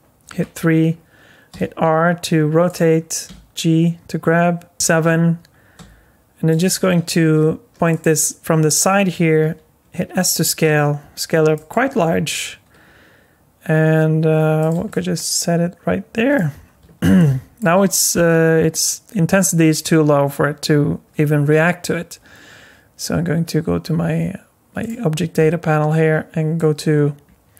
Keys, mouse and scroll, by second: 0.3 KP_3, 1.5 r, 3.3 g, 4.7 KP_7, 5.8 r, 6.6 g, 9.4 s, 11.9 g, 14.9 middle click, 16.6 scroll up 2, 17.2 shift+middle click, 24.8 click, 26.6 click.